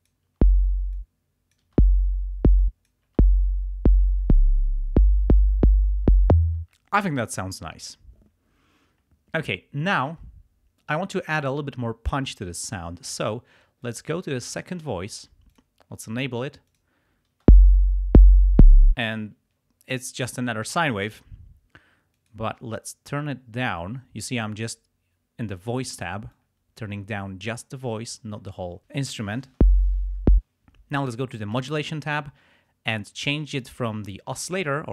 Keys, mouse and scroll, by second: 0.9 click, 1.7 space, 2.6 space, 2.6 click, 6.5 space, 13.8 click, 15.5 click, 16.7 click, 17.4 space, 18.8 space, 22.1 click, 24.9 click, 29.5 space, 30.2 space, 31.5 click, 33.5 click.